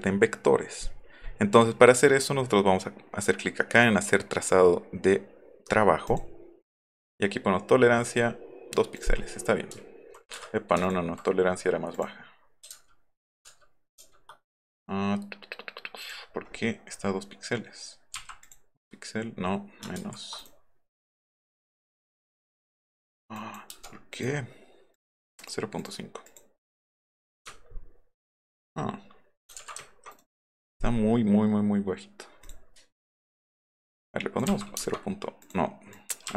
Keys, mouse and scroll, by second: 6.1 click, 9.0 click, 10.9 alt+click, 11.9 click, 12.8 ctrl+z, 14.0 ctrl+z, 14.7 right click, 16.0 click, 18.4 click, 20.0 ctrl+z, 20.4 click, 22.3 click, 23.4 click, 23.7 KP_0, 24.1 click, 25.0 click, 25.4 click, 25.8 click, 26.3 click, 27.4 middle click, 27.4-27.9 scroll up 2, 27.7 alt+middle click, 28.5-28.8 alt+scroll up 2, 29.0 alt+scroll down 1, 29.4 scroll up 1, 29.6 ctrl+z, 29.8 alt+scroll down 1, 30.1 right click, 32.4 click, 33.9 click, 34.6 KP_2, 34.8 KP_Enter, 35.4 click.